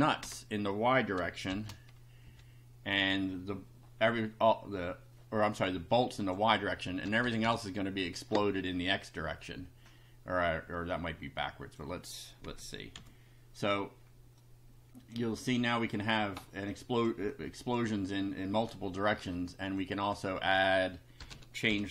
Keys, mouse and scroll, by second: 0.2 Return, 1.5 shift+], 2.2 Up, 6.2 click, 7.0 BackSpace, 10.9-11.9 drag, 12.5 x, 13.0 F5, 14.4 click, 16.7 click, 17.3 click, 19.8 click, 21.2 BackSpace, 21.3 2, 21.7 F5.